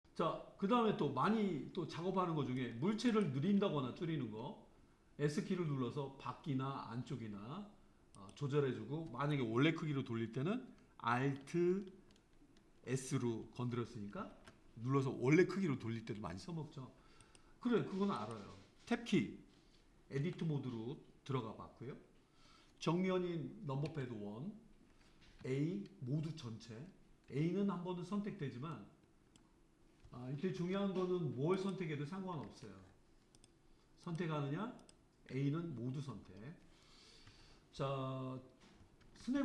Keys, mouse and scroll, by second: 0.0 click, 1.3-3.1 middle drag, 3.1 click, 4.0 s, 14.2 alt+s, 17.3 click, 18.2 click, 20.6 Tab, 23.9 KP_1, 25.5 a, 27.3 a, 28.8-30.8 middle drag, 32.6 click, 34.1 click, 34.8 click, 35.3 a, 37.3 KP_1.